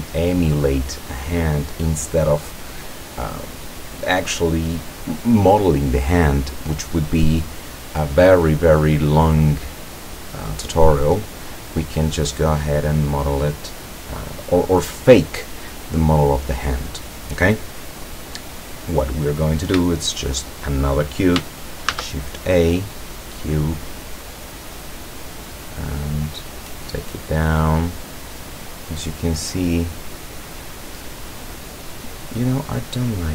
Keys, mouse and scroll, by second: 21.9 shift+a, 23.1 click, 23.7-24.1 scroll down 1, 24.8-26.5 drag, 26.9-28.4 drag, 29.0-30.0 middle drag, 31.5 right click, 31.9-33.0 middle drag.